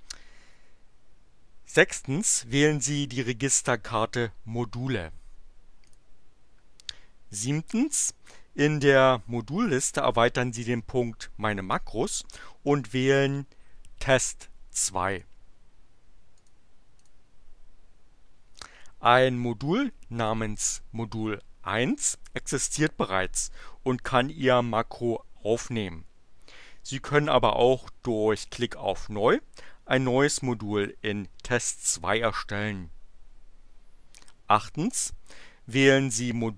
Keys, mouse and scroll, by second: 5.9 click, 15.0 click, 16.4 click, 17.0 click.